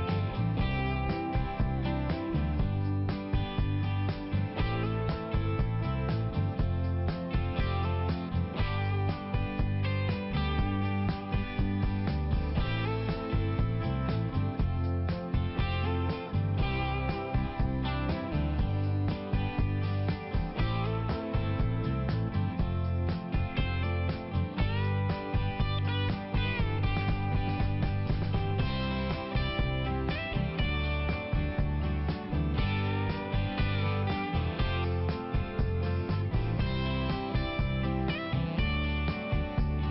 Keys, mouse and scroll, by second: 1.2 click, 1.4 click, 1.6 click, 1.7 double click, 2.1 double click, 2.3 double click, 2.5 double click, 3.2 click, 3.8 click, 4.4 click, 4.5 click, 4.7 click, 4.8 double click, 5.1 double click, 6.4 click, 7.5 click, 7.9 click, 8.2 double click, 8.3 double click, 8.6 double click, 8.7 double click, 8.9 double click, 9.0 double click, 9.3 double click, 9.4 double click, 9.7 double click, 9.8 double click, 10.1 double click, 10.6 click, 10.8 click, 11.0 click, 11.1 double click, 11.2 double click, 11.3 double click, 11.5 double click, 11.6 double click, 11.8 double click, 12.0 double click, 12.2 double click, 12.3 double click, 12.6 double click, 12.7 double click, 13.4 click, 13.5 click, 13.8 click, 13.8 click, 14.1 click, 14.2 double click, 14.5 double click, 14.6 double click, 14.8 double click, 15.0 double click, 15.2 double click, 15.4 double click, 15.8 double click, 15.8 double click, 16.0 click, 16.2 click, 16.4 click, 16.5 double click, 17.3 double click, 20.0 click, 20.2 click, 20.4 click, 20.6 double click, 21.0 double click, 21.1 double click, 21.4 double click, 21.5 double click, 21.9 double click, 22.1 double click, 22.4 double click, 22.5 double click, 22.9 double click, 23.0 double click, 23.5 click, 23.6 click, 24.7 click, 24.8 click, 26.1 click, 26.7 click, 26.8 click, 27.2 click, 29.0 click, 29.1 click, 29.4 click, 29.5 double click, 30.2 double click, 30.3 double click, 30.8 click, 31.0 click, 31.3 click, 31.4 click, 31.8 click, 31.9 click, 32.3 click, 32.4 click, 32.7 click, 32.8 double click, 33.1 double click, 33.2 double click, 33.8 click, 36.6 click, 36.8 click, 37.1 click, 37.2 double click, 37.4 double click, 37.9 click, 38.2 click, 38.3 double click, 39.0 double click.